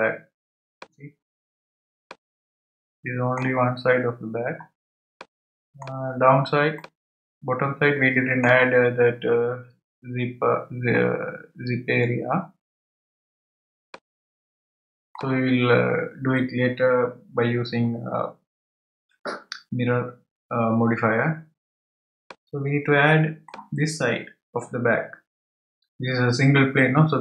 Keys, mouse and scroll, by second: 1.0 scroll up 4, 1.6-2.1 scroll down 1, 2.1-4.7 middle drag, 4.7-5.2 scroll down 1, 5.2-6.2 middle drag, 6.2-6.8 scroll down 1, 6.8-9.8 middle drag, 13.2-13.9 scroll down 2, 13.9-16.9 middle drag, 22.3-25.4 middle drag.